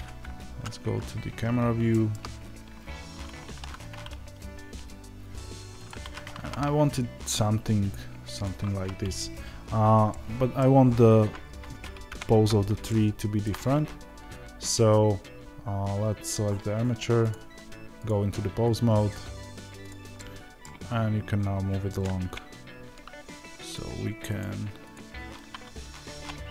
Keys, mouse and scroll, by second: 0.9 scroll down 1, 2.2-3.4 scroll up 1, 3.4 r, 10.0 scroll up 1, 10.0-17.2 middle drag, 10.7-11.3 scroll up 2, 11.3-12.0 scroll down 2, 12.0 KP_0, 13.4-17.2 shift+scroll down 2, 17.2 click, 20.1-23.7 middle drag, 20.7-21.3 scroll up 2, 21.3-22.1 scroll down 2, 22.1 KP_0, 23.7 click.